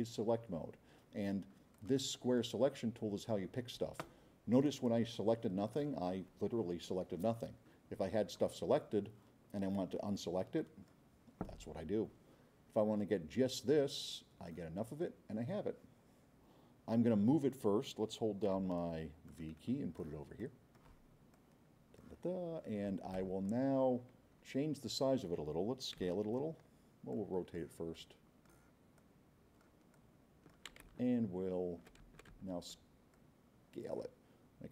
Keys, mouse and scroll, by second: 1.7-2.5 drag, 4.5-5.8 drag, 8.4-8.9 drag, 9.0 middle click, 10.6-11.0 drag, 18.5 v, 19.3-20.1 drag, 20.4-20.9 drag, 21.3-22.1 drag, 23.5 scroll up 2, 24.4 scroll down 2, 26.1 c, 27.1 click, 27.9 click, 28.6 click, 29.6 click, 29.9 click, 31.3 v, 32.1 c, 32.4 x, 33.1 click.